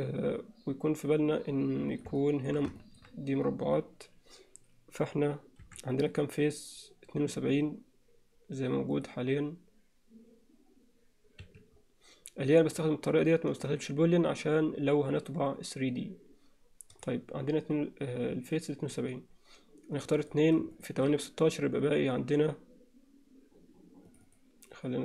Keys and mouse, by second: 2.2 alt+middle click, 2.8 alt+shift+middle click, 5.7 3, 6.0 click, 8.9-11.5 drag, 12.8-17.3 drag, 20.7 shift+click, 24.1 click.